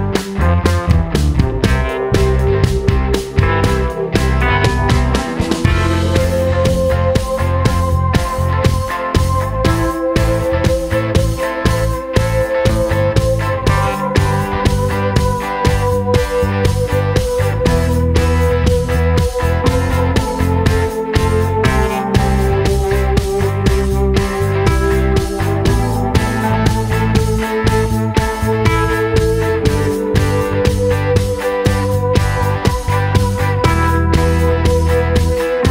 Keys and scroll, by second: 2.8 super+c, 2.9 super+v, 6.6 super+c, 6.6 super+v, 7.8 super+v, 8.9 super+v, 9.7 super+v, 24.2 super+c, 24.2 super+v, 28.2 super+d.